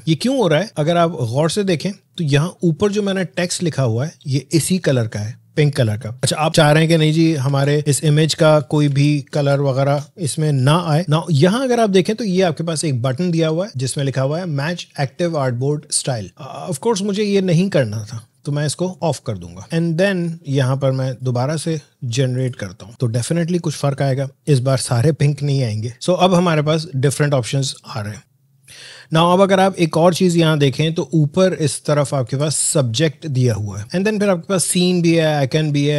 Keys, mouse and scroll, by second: 2.6 alt+scroll up 1, 5.2 alt+scroll down 1, 6.5-6.9 alt+scroll down 1, 6.9 ctrl+z, 26.2 click.